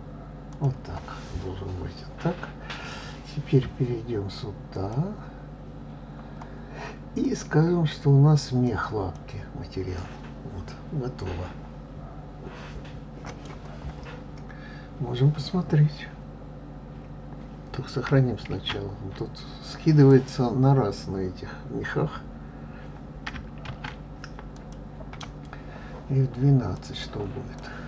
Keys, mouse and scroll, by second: 1.4 click, 5.7 click, 8.1-11.2 drag, 15.2-15.9 scroll down 3, 15.9 scroll up 2, 21.0 click, 25.5 click.